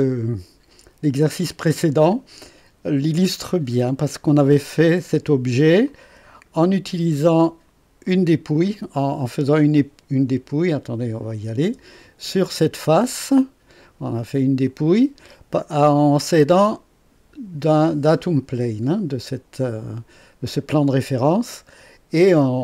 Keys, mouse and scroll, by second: 5.9-6.7 drag, 11.2 click, 11.6 space, 12.3-13.6 drag, 15.8-16.9 drag, 18.3 click.